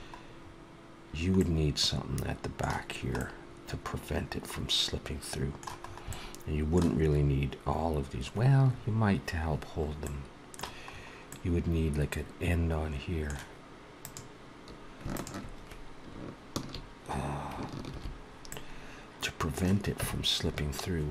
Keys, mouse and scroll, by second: 0.8 scroll up 1, 0.9 scroll down 1, 1.2 middle click, 3.0 middle click, 5.7 scroll up 1, 5.9 middle click, 9.9 middle click, 10.7-11.1 scroll up 3, 11.1 middle click, 14.2 click, 15.0 shift+click, 17.7 shift+h, 18.3 middle click, 19.9 Tab, 21.0 Tab.